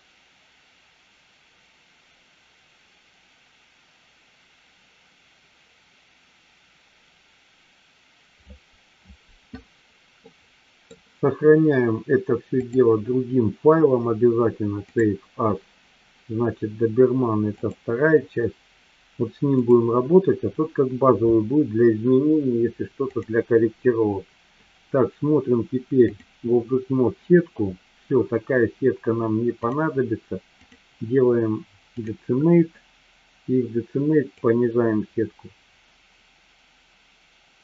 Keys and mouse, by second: 10.3-10.9 middle drag, 12.7-15.2 drag, 23.2 click, 26.0 click, 30.5-32.2 drag, 34.3-37.6 drag.